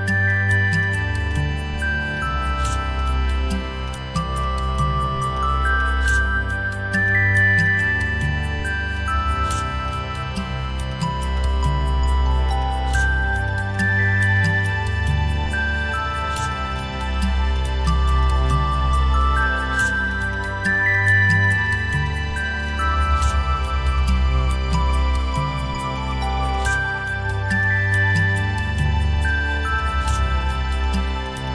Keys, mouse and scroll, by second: 6.0 shift+click, 8.3 shift+click, 12.5 right click, 15.1 alt+click, 16.7 alt+click, 17.9 alt+click, 18.5 alt+click, 19.4 alt+click, 20.3 alt+click, 20.9 alt+click, 22.0 alt+click, 24.0 alt+click, 24.7 alt+click, 26.0 right click, 26.5 alt+click, 27.6 alt+click, 29.0 ctrl+z, 31.2 double click.